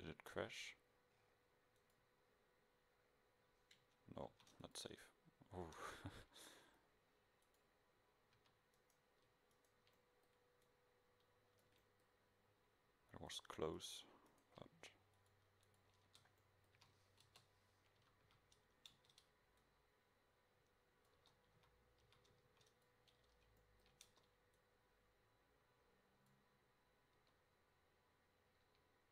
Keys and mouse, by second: 2.9 middle click, 4.4 ctrl+s, 6.7 middle click, 8.4 a, 15.2 click, 16.2 Tab, 16.8 a, 17.3 KP_0, 18.1 a, 18.4 a, 19.0 Tab, 21.3 Tab, 21.7 a, 22.1 a, 22.5 ctrl+s, 24.2 Tab, 24.7 middle click, 27.3 Tab, 28.7 Tab.